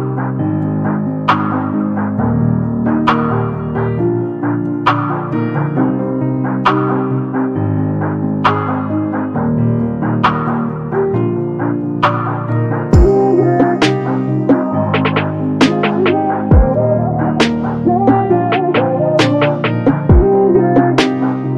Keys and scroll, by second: 3.3 m, 9.1 space, 15.0 r, 18.1 space.